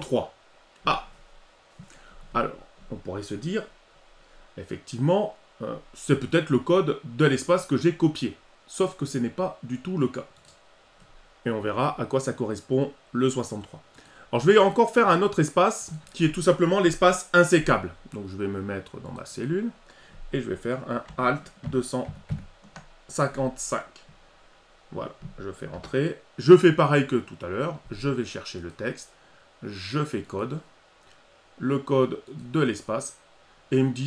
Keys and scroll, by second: 21.6 alt+2, 23.3 5.